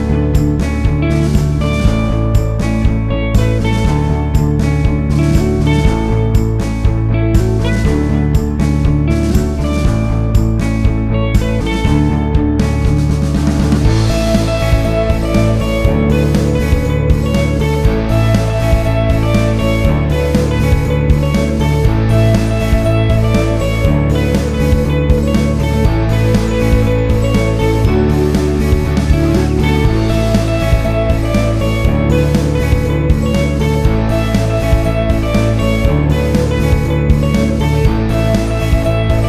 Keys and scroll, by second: 0.5 ctrl+z, 2.6 8, 2.9 Return, 8.3 6, 8.4 Return, 13.0 Up, 23.2 ctrl+z, 30.6 ctrl+z.